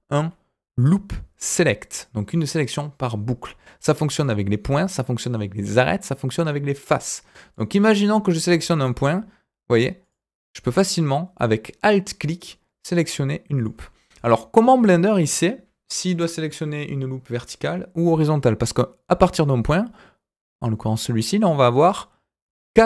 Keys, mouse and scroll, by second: 4.1 click, 5.5 click, 6.8 click, 7.5 click, 8.8 alt+click, 10.0 alt+click, 11.3 alt+click, 12.2 alt+click, 12.8 alt+click, 13.5 alt+click, 14.1 click, 14.5-14.9 scroll up 1, 17.3-18.0 scroll down 1, 18.3 scroll up 2.